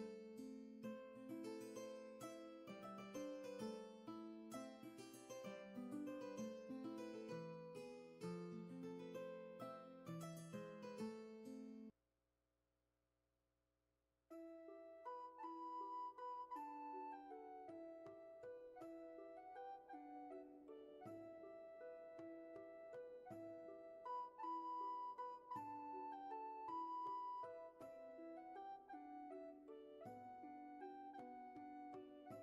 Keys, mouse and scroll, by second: 0.8 ctrl+z, 4.5-5.7 scroll down 1, 5.7-6.2 scroll up 1, 7.4 space, 13.9 ctrl+z, 21.5 scroll down 1, 22.0 space, 23.0-23.7 scroll down 1, 23.7-25.3 scroll up 1, 28.7 ctrl+z, 31.9 ctrl+shift+z.